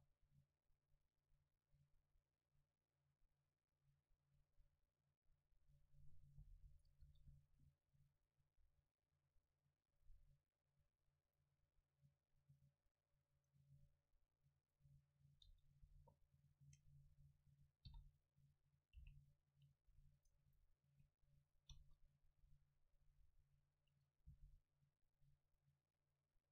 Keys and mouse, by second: 6.1 middle click, 6.8-8.6 right drag, 7.1 KP_7, 8.6-13.4 drag, 15.5 Tab, 15.9 a, 17.1-19.0 drag, 17.9 o, 19.0 c, 20.4-22.0 drag, 21.8 KP_0, 23.1 KP_7, 24.3 c.